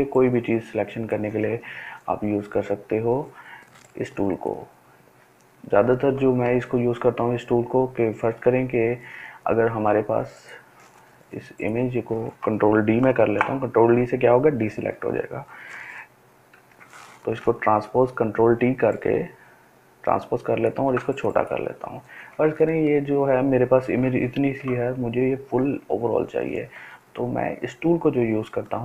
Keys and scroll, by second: 2.2 ctrl+z, 13.1 ctrl+d, 16.5 ctrl+t.